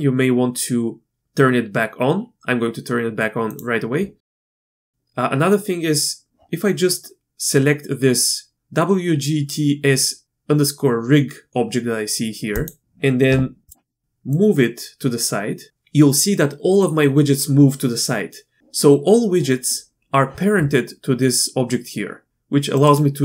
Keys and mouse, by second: 12.5 click, 14.3-15.7 drag, 22.3 click.